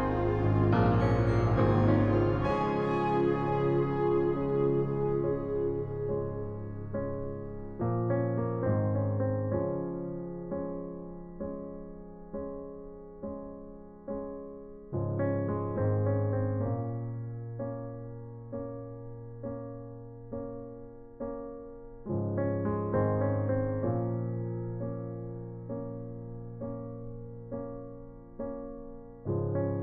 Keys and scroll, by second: 6.9 typing, 8.7 ctrl+z, 15.1-16.8 typing, 19.9-20.7 typing, 21.0 ctrl+alt+z, 24.9 v.